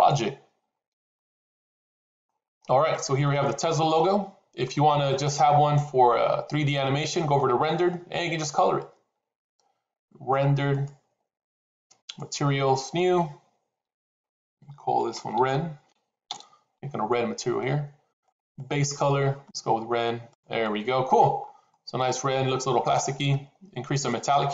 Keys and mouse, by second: 1.0-2.1 middle drag, 3.1-4.6 middle drag, 6.0 middle click, 11.0 click, 12.7 click, 13.9-18.1 drag, 18.3 click, 20.5-21.1 middle drag, 21.7-22.8 middle drag, 24.0-24.5 drag.